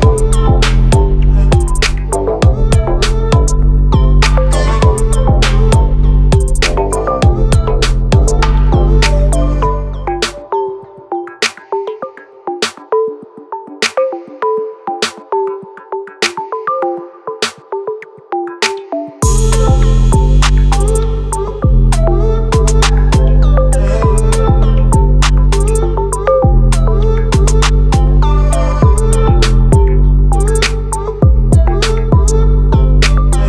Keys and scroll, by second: 18.5 ctrl+t, 31.4 ctrl+t.